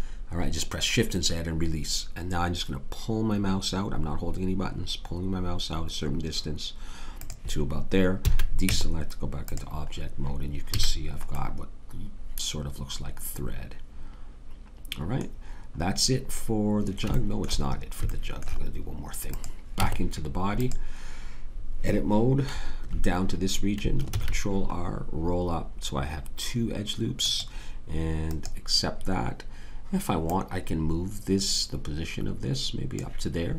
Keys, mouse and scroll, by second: 8.2 a, 8.7 Tab, 10.7 a, 19.2 click, 19.8 Tab, 24.1 ctrl+r.